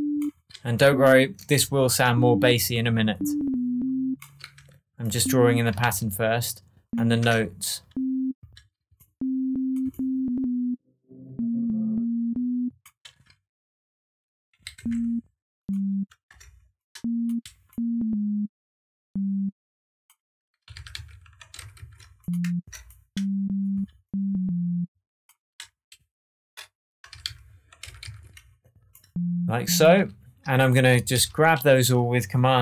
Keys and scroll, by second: 2.0 BackSpace, 5.8 super+d, 7.2 super+BackSpace, 14.7 Down, 16.2 BackSpace, 20.7 alt+super+z, 21.5 shift+super+z, 22.6 shift+super+BackSpace, 27.1 super+z, 27.8 shift+super+z, 29.9 super+d, 31.1 super+a.